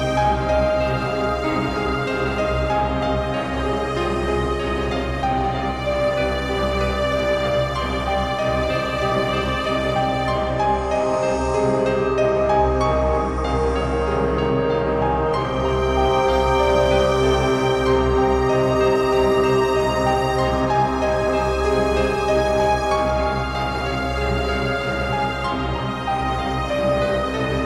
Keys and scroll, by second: 2.2 ctrl+s.